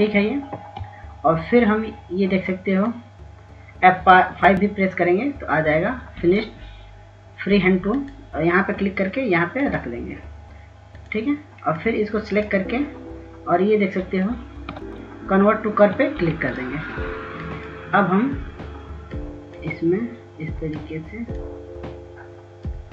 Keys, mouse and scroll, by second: 3.4-6.3 drag, 5.0 s, 8.5 click, 10.2-13.5 drag, 15.4 ctrl+s, 16.6 s, 17.2-22.9 drag.